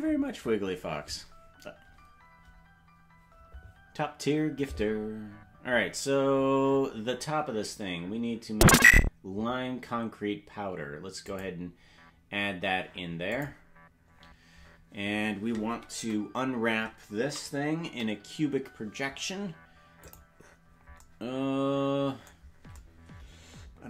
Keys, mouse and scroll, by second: 5.2-6.1 scroll down 9, 6.3-6.9 scroll up 8, 11.2-13.7 drag, 16.0 Tab, 17.3 a, 17.9 u.